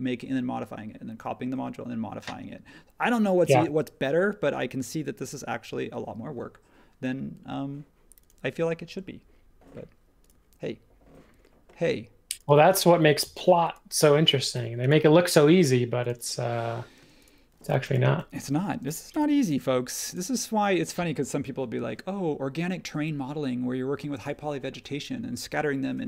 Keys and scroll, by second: 17.0-19.6 typing.